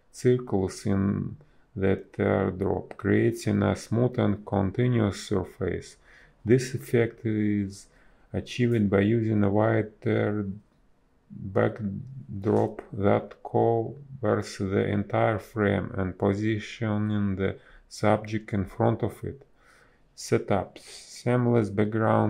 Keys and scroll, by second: 0.3 b, 1.4 ctrl+z, 2.7 ctrl+z, 3.6 space, 4.7 ctrl+z, 5.8 space, 8.1 space, 10.6 ctrl+z, 11.6 ctrl+z, 12.9 ctrl+z, 15.8 space, 18.4 space, 21.1 space.